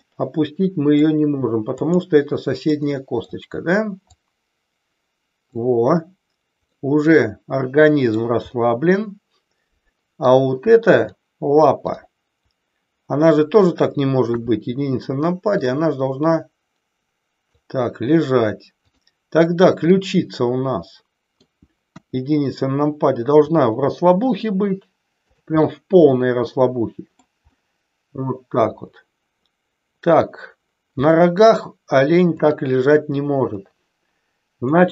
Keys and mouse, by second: 1.9-2.4 drag, 2.6-3.2 middle drag, 4.1-5.5 drag, 6.6-8.1 middle drag, 8.5-10.2 middle drag, 11.7 click, 14.2 KP_1, 15.5-17.5 drag, 18.9 click, 19.9-21.4 middle drag, 22.0 KP_1, 23.4 r, 25.2 click, 25.6-27.1 middle drag, 27.5-30.2 middle drag, 31.0 middle click, 33.5-34.6 middle drag.